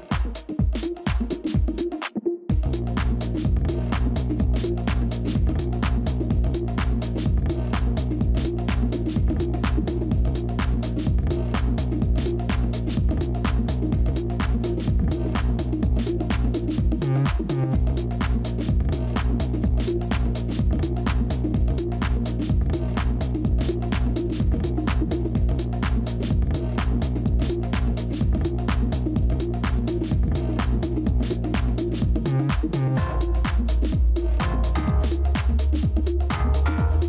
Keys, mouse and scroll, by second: 1.9 scroll down 1, 12.5 ctrl+g, 18.9-21.5 typing, 18.9 Tab, 24.5 ctrl+shift+[, 27.1 ctrl+z, 28.4 right click.